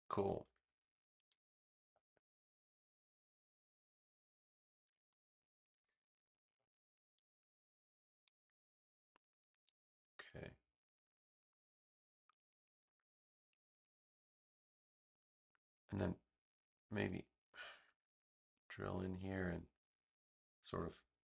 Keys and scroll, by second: 0.1 v.